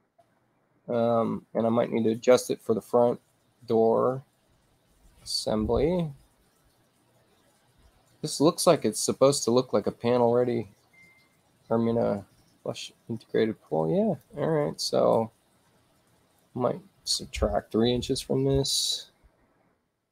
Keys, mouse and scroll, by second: 0.3-2.4 drag, 3.7-14.2 drag, 16.4 click, 18.1 3, 18.7 Tab, 19.9 click.